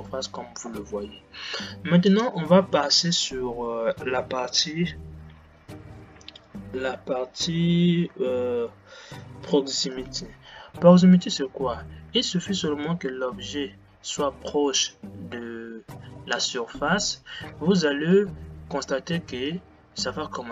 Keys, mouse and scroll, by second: 10.2 click, 13.1-20.5 middle drag.